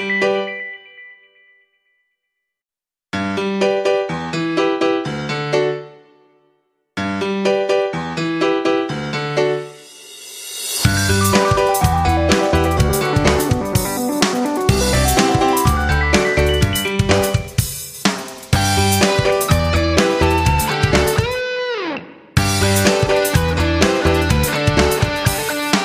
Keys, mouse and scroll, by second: 3.7 click, 10.2-11.0 ctrl+scroll up 2, 11.8 click, 14.2 click, 23.5 ctrl+scroll, 24.1-25.8 drag.